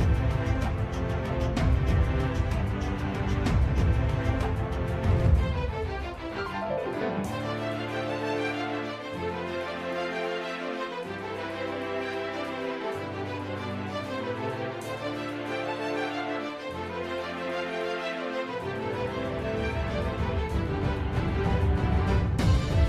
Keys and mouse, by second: 0.1 e, 9.0 s, 14.1 KP_1, 15.3 shift+middle click, 17.0 s, 19.6 s, 22.0 s.